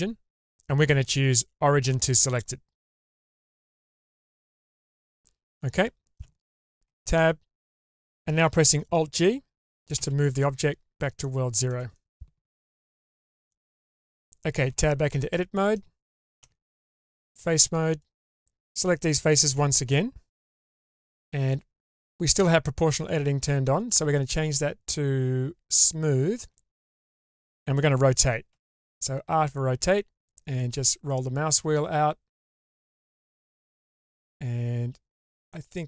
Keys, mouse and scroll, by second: 4.7-6.2 middle drag, 6.8 Tab, 10.0 alt+g, 11.2-11.7 shift+middle drag, 12.0-12.8 middle drag, 13.0-13.4 shift+middle drag, 13.5 middle click, 14.1 click, 14.6 Tab, 15.3-15.7 middle drag, 16.4 3, 17.0 shift+middle drag, 18.0-18.4 drag, 18.8-19.5 middle drag, 19.9-20.4 shift+middle drag, 23.8-25.8 drag, 26.4-27.2 shift+middle drag, 28.5 r.